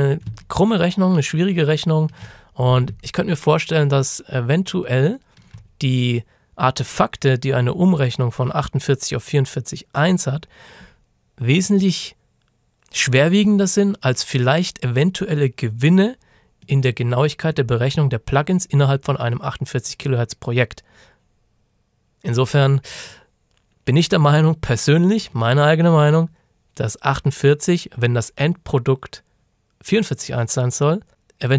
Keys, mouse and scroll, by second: 0.5-0.9 ctrl+shift+scroll down 1, 1.5 ctrl+shift+scroll up 1, 1.8 ctrl+shift+scroll down 1, 3.0-3.9 ctrl+shift+scroll down 1, 3.9 ctrl+shift+scroll up 1, 5.6-7.0 shift+scroll up 1, 7.0-7.6 scroll up 1, 16.7 click, 22.4 click.